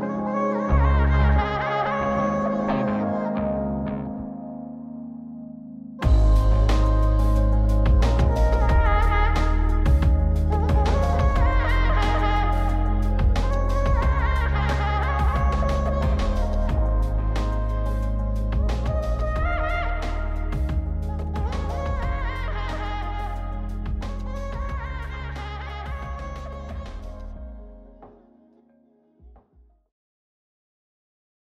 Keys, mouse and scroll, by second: 0.8 click, 3.3 click, 5.0-10.1 drag, 11.0 scroll up 2, 11.6-13.6 middle drag, 14.1-14.5 scroll down 2, 14.5 middle click, 15.7 click, 16.1 shift+a, 19.3 click, 20.5 click, 21.4 click, 22.1 click, 23.0 click, 24.1 click, 25.0 click, 25.6 click, 26.4 scroll down 1, 26.7-29.9 middle drag.